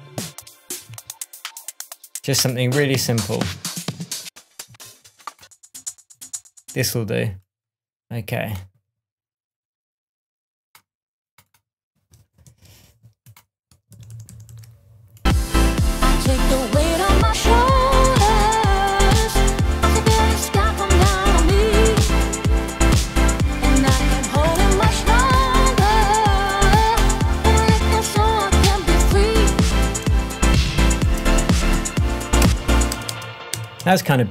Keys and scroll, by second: 0.2 Up, 0.8 Down, 2.8 Down, 4.6 Down, 6.7 space, 12.4 shift+Tab, 13.9 super+d, 14.2 super+d, 14.4 super+d, 16.1 BackSpace, 24.2 Down, 24.5 Return, 25.2 Down, 25.3 Return, 26.6 Down, 26.9 Return, 27.9 Down, 28.1 Return, 29.0 Down, 29.8 Down, 30.0 Return, 31.0 Up, 32.1 Down, 32.4 Return, 32.9 space.